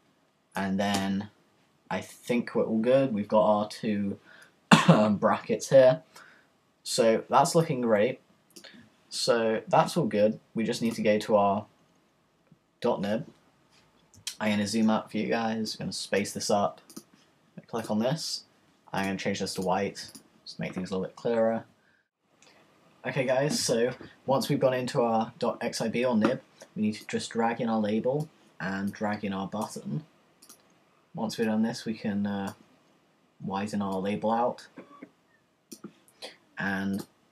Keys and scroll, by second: 0.9 Return.